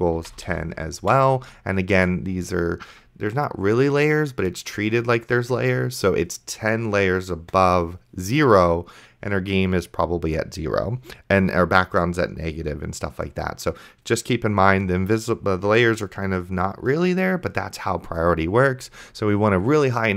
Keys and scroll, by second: 0.0-0.5 typing, 1.3 ctrl+s.